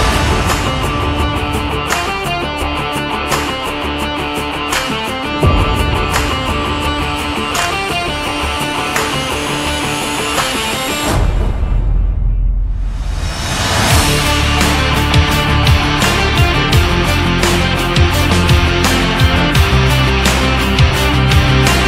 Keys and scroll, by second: 5.7 shift+Up, 6.4 shift+Down, 7.5 Down, 10.2 Up, 12.9 Down, 15.0 Up, 16.2 Down, 16.9 Up, 20.7 Up.